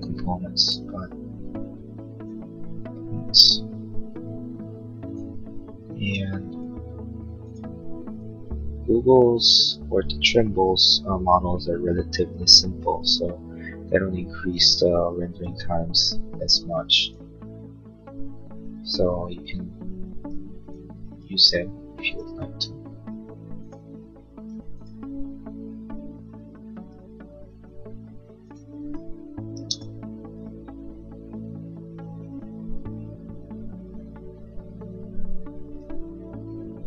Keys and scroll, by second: 29.5 space.